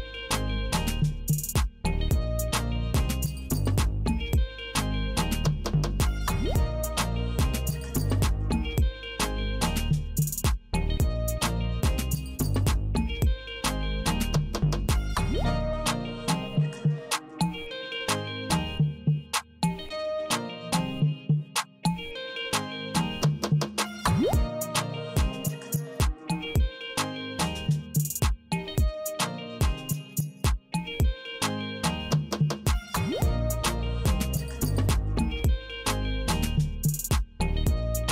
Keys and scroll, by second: 1.0 Return, 2.5 Return, 5.7 Return, 7.7 F5, 9.7 shift+Tab, 11.7 Left, 13.4 Left, 15.0 Left, 16.4 Left, 17.7 BackSpace, 19.7 BackSpace, 21.7 Up, 23.7 Right, 25.6 w, 27.0 w, 28.4 w, 29.9 w, 31.9 Right, 33.4 c, 35.0 Right, 37.0 p.